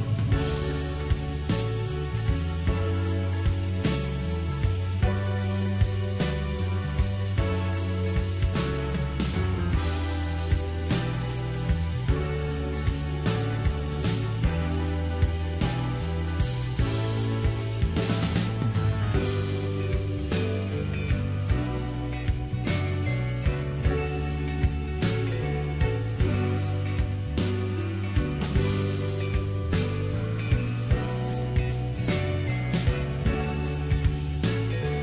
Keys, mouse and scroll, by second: 4.8-6.0 middle drag, 6.0-6.9 scroll down 2, 6.9-8.5 scroll down 1, 8.5 click, 9.3 Tab, 10.0-13.0 middle drag, 14.6-15.3 scroll up 5, 15.3-18.3 middle drag, 18.3 KP_7, 26.2-28.1 middle drag, 28.1-28.4 scroll down 2, 28.4-30.2 middle drag, 30.2-30.9 scroll up 1, 34.7 Tab.